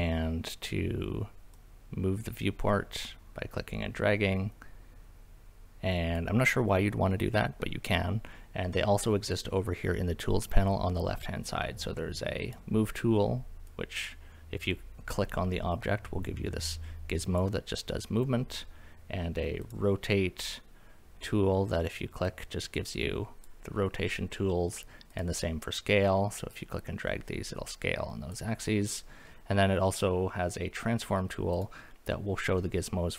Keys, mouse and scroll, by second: 1.5-6.1 drag, 12.4 click, 13.7 click, 15.7 click, 18.7-19.7 drag, 22.3 click, 25.1 click, 26.5 click, 31.5 click, 32.6-33.1 middle drag.